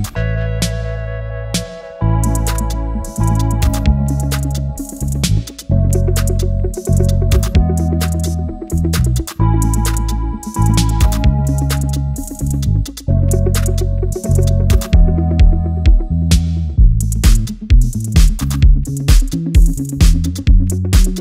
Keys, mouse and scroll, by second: 2.9 click, 4.3-4.7 drag, 4.9 click, 7.2-8.4 drag, 10.1 middle click, 11.8-14.6 drag, 16.9 shift+a, 21.0-21.2 drag.